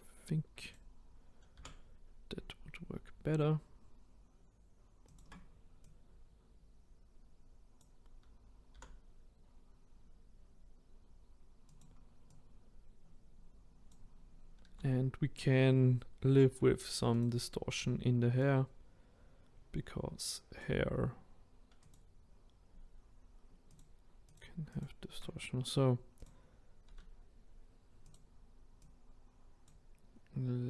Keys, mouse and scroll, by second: 0.7-1.6 right drag, 1.6 r, 5.9 click, 8.8 r, 12.4 click, 14.7 s, 18.5 click, 21.9 click, 23.8 shift+click, 24.3 shift+click, 26.2 click, 26.9 s, 28.9 click.